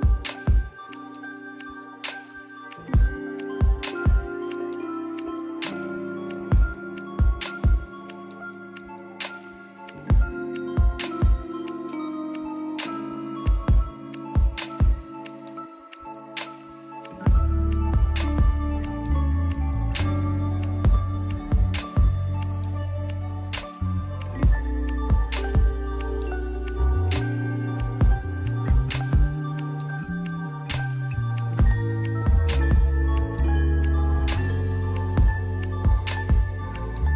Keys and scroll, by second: 0.4 scroll down 1, 0.5-0.9 scroll up 1, 1.5 ctrl+z, 2.1 ctrl+z, 2.9 ctrl+z, 3.2 ctrl+z, 4.1 ctrl+z, 6.4 scroll down 1, 6.5 scroll up 1, 9.3 scroll down 1, 9.9 scroll down 1, 10.2-10.7 scroll up 2, 10.8 scroll down 1, 11.0 scroll up 1, 11.2 scroll down 1, 11.3 scroll up 1, 12.9 scroll up 1, 15.6 scroll down 1, 15.8-16.1 scroll up 1, 16.2 scroll down 1, 16.4 scroll up 1, 19.6 scroll down 1, 26.4 scroll up 1, 27.4 scroll down 1, 27.5 scroll up 1, 27.6 scroll down 1, 28.4 ], 31.4 scroll down 1, 31.5 scroll up 1.